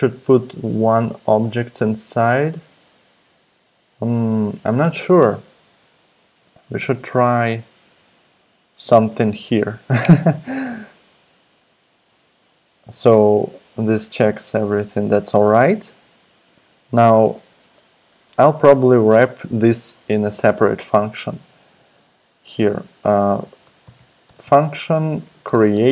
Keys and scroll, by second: 17.2 Return, 17.6 Tab, 23.1-25.9 typing.